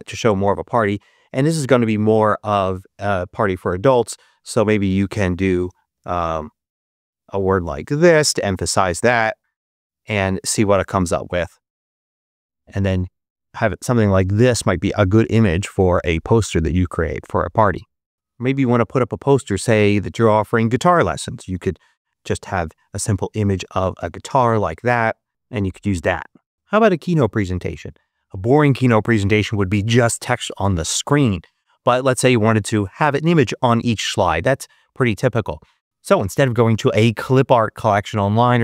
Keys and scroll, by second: 5.4-7.4 typing, 7.9 Return, 20.9-22.0 typing, 22.4 Return.